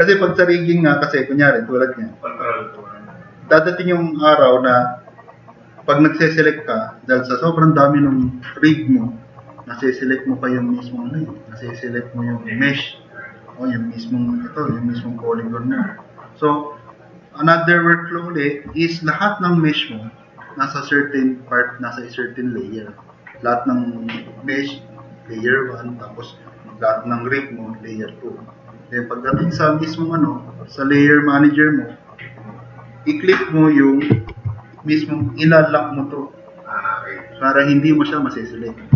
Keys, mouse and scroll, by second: 0.7 click, 1.8 click, 4.7 click, 14.9 click, 15.7 click.